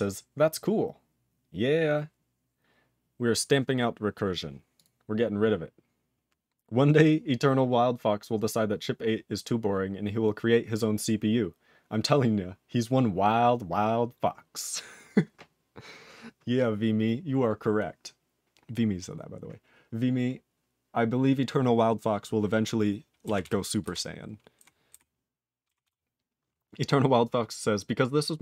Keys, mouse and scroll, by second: 4.7 click, 4.8 click, 5.8-9.7 scroll down 1, 23.4 ctrl+s, 23.8 ctrl+b, 24.5 ctrl+e, 24.9 ctrl+b, 25.8 ctrl+s.